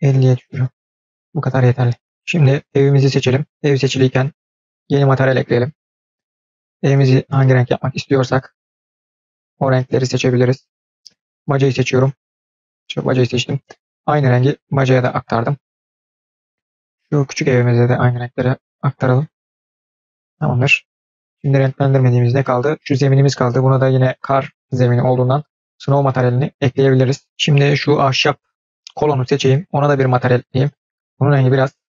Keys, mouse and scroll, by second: 3.2 click, 4.4 drag, 5.6 click, 11.2 click, 12.5 click, 13.3 click, 16.6 click, 17.6 click, 22.7 click, 24.8 click, 28.0 click, 29.7 drag, 30.7-31.9 drag.